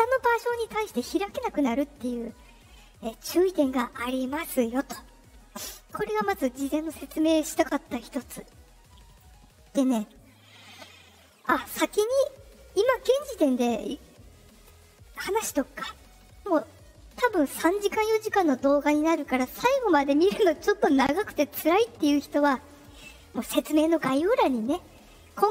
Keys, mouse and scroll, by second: 5.8 click, 9.0 click.